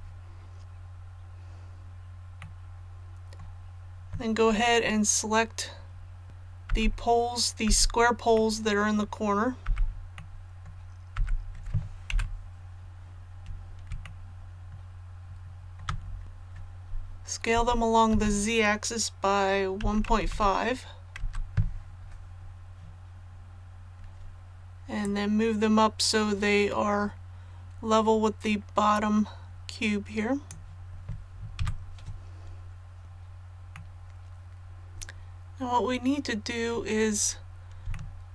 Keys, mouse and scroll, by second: 2.4 middle click, 8.3 middle click, 10.1-11.3 middle drag, 12.1 KP_1, 14.0-15.8 shift+middle drag, 16.2 click, 17.5 s, 18.1 z, 19.8 KP_1, 20.0 KP_Decimal, 20.3 KP_5, 23.2 scroll down 1, 25.0-30.6 drag, 31.5 a, 33.0 click, 33.7-35.0 middle drag, 35.0 scroll up 1, 35.1-35.4 scroll down 1, 35.4 scroll up 1, 37.9 shift+middle click, 38.0 shift+scroll down 1.